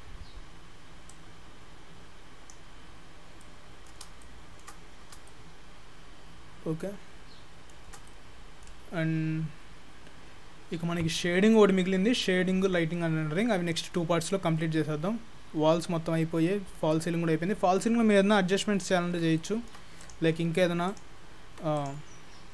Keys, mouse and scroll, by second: 1.1 click, 2.9-3.4 scroll up 1, 3.4 middle click, 3.4-4.0 scroll up 4, 4.2 shift+middle click, 6.0 shift+middle click, 8.1 middle click, 14.7 middle click, 19.4 shift+middle click, 20.1 click, 20.4 Tab, 20.9 click, 21.5 Tab, 21.8 click.